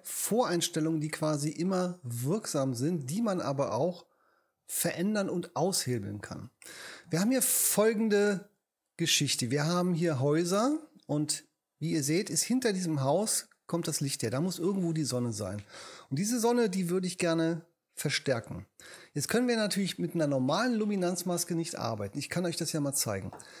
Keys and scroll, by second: 17.2 h.